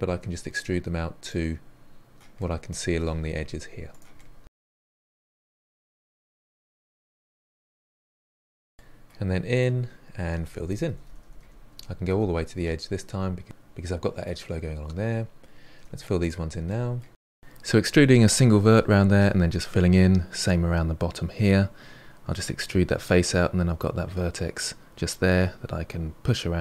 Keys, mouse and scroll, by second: 0.0-7.6 typing, 0.2 middle click, 1.0 middle click, 2.0 middle click, 2.8 click, 3.5 click, 3.8 click, 4.4 click, 5.0 click, 5.3 middle click, 5.6 click, 6.1 click, 6.4 middle click, 7.0 click, 7.5 click, 8.3 middle click, 9.2 2, 9.8-10.2 middle drag, 10.2 click, 10.6-12.2 typing, 11.3 middle click, 12.9-14.7 middle drag, 14.7-15.7 scroll up 2, 15.7-18.6 typing, 15.8 click, 15.9 middle click, 16.2 middle click, 16.8 middle click, 17.2 middle click, 17.9 click, 18.2 middle click, 18.4 middle click, 18.6 middle click, 18.8 scroll down 1, 18.9 middle click, 19.7 scroll up 1, 19.8 middle drag, 20.1-21.8 typing, 20.2 click, 20.8 middle click, 21.1 click, 21.3 middle drag, 21.7 click, 22.0 middle drag, 22.1 click, 22.2 middle click, 22.8-24.3 typing, 23.1 middle drag, 23.9 middle click, 24.5-24.8 middle drag, 24.8 scroll down 1, 24.9 shift+middle click, 25.4-26.6 typing, 26.2 middle drag, 26.5 middle click.